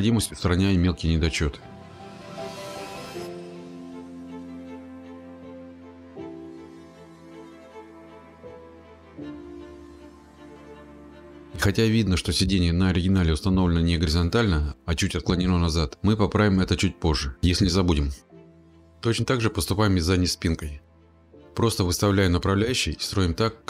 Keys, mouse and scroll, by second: 0.2 middle click, 1.7 click, 1.7 click, 2.1 click, 4.7 click, 4.7 middle click, 4.9 click, 5.7 click, 6.0 click, 7.1-10.9 middle click, 7.3-7.8 scroll, 8.3-8.9 scroll, 9.9 click, 10.3 click, 11.3 click, 15.1 middle click, 15.2 middle click, 15.3-15.9 scroll, 16.4 scroll, 18.1 click, 19.4 click, 21.1 click, 21.6 click, 22.3 click, 23.4 click.